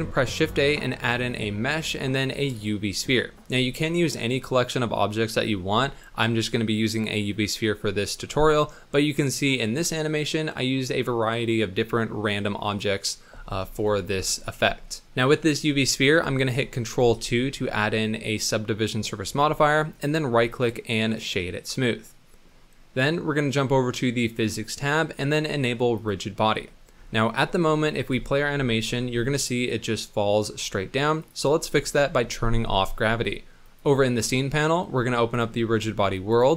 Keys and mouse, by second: 15.8 click, 15.9 middle click, 17.0 ctrl+2, 18.0-19.3 middle drag, 19.9-21.3 drag, 28.1 space, 29.1 space, 29.4-32.1 drag, 35.4 click, 36.3 click.